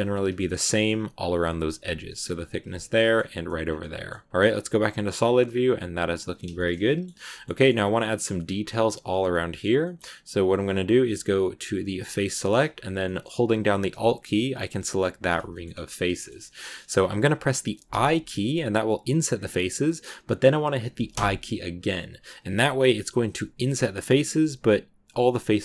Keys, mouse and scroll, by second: 0.0 middle click, 0.4 scroll up 1, 0.5 scroll down 2, 0.6 middle click, 1.2 KP_1, 2.7 shift+middle click, 3.5 scroll down 1, 3.7 middle click, 4.2 z, 4.4-6.7 middle drag, 6.7 scroll down 1, 6.7 middle click, 7.2 scroll up 1, 7.2-9.7 shift+middle drag, 9.7 scroll up 1, 9.7-11.9 middle drag, 11.9 click, 12.2-15.0 middle drag, 15.0 alt+right click, 15.4 shift+middle click, 15.8-16.3 scroll up 2, 16.0 shift+middle click, 16.3 middle click, 16.8-17.8 scroll down 1, 17.8 i.